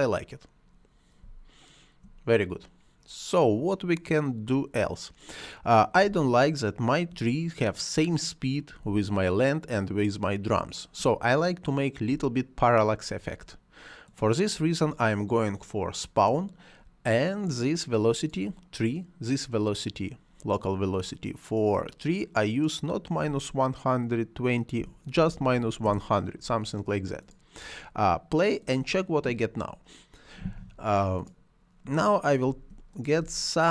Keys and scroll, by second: 1.1 space, 5.9 space, 8.6 space, 11.9 space, 24.6 -, 25.0 1, 25.7 Return, 32.3 space.